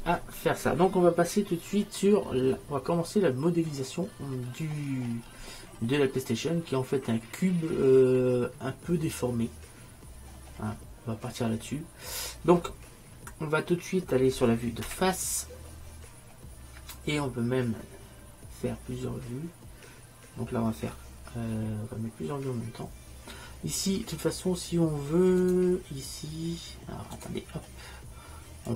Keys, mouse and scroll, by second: 4.4-6.0 middle drag, 10.3-13.7 middle drag, 25.5-27.3 drag.